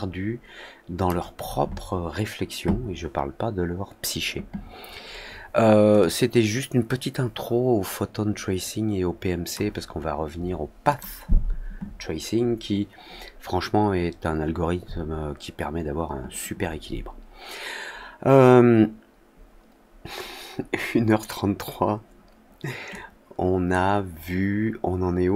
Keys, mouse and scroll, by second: 5.9-9.5 drag, 10.8 click, 22.8 click.